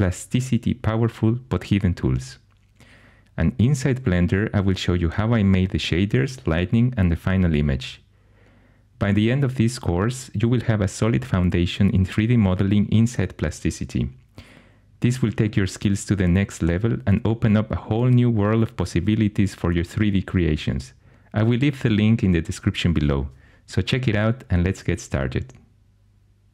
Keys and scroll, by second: 0.0 x, 1.3-5.8 typing, 8.3-9.1 typing, 12.3 super+l, 13.8 super+l, 14.2 super+l, 17.1 super+l, 18.6-20.0 typing.